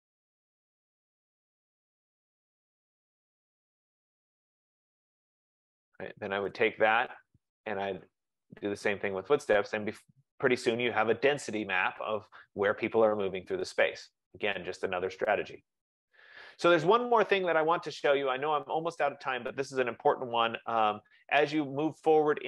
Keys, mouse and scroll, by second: 0.1 click, 1.2 F15, 1.2 click, 2.5 click, 4.0 click, 5.4 click, 6.6 click, 8.5 click.